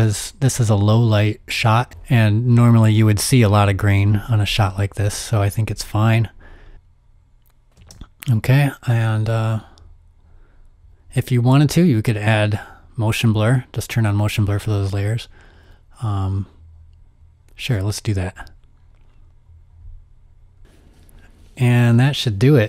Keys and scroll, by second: 5.3 z, 7.8 space.